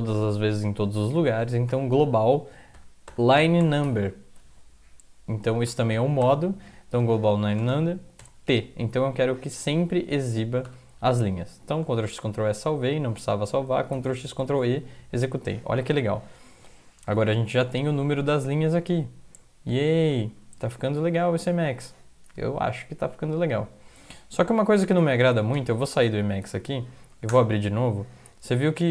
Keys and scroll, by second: 1.7-4.4 typing, 5.4-8.2 typing, 10.7 End, 11.8 ctrl+x, 12.1 ctrl+s, 13.9 ctrl+x, 14.4 ctrl+e, 17.0 Up, 17.2 Up, 17.4 Up, 17.5 Up, 18.0 Up, 18.6 Up, 18.9 Down, 19.4-19.9 Down, 20.1 Down, 20.1 Up, 20.4 Up, 20.6 Down, 25.3 ctrl+x, 25.8 ctrl+s, 26.4 alt+F4, 27.0 Up, 27.3 Return.